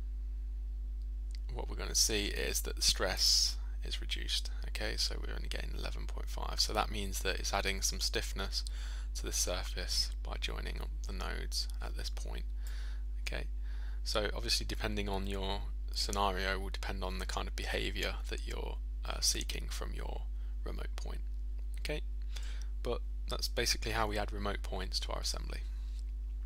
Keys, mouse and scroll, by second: 3.2 click, 22.4-23.4 middle drag.